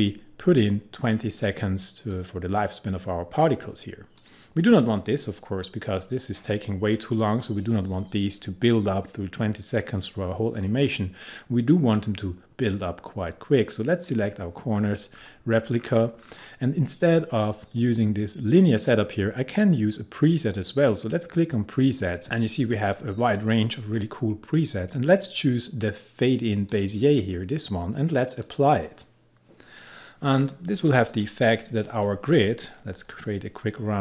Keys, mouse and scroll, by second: 14.1 click, 14.8-18.0 scroll down 1, 21.0-25.5 drag, 26.7 click, 31.2-34.0 drag.